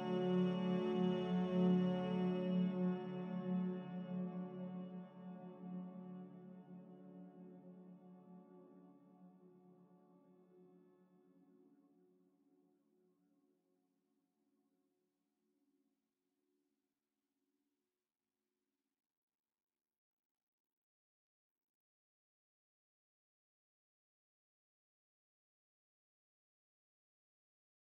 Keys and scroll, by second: 24.2 ctrl+c.